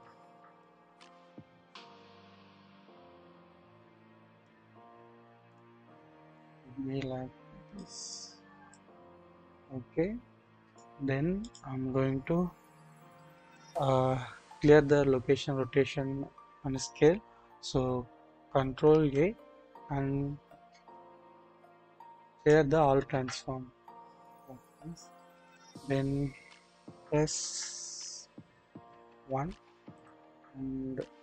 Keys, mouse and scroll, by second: 0.6-4.5 middle drag, 5.5 middle click, 6.5-7.8 middle drag, 8.7-10.8 middle drag, 11.4 shift+middle click, 18.8 ctrl+a, 23.4-25.0 drag, 25.7-26.2 scroll up 1, 26.2-27.3 scroll down 1, 27.5-28.8 typing, 29.4-30.2 scroll up 1, 30.2-30.5 scroll.